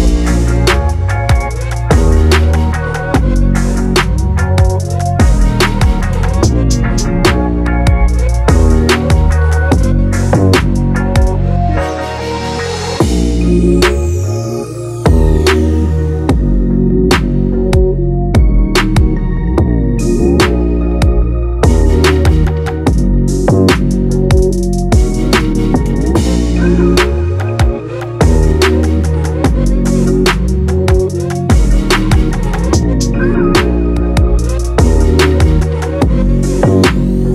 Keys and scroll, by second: 18.5 ctrl+e.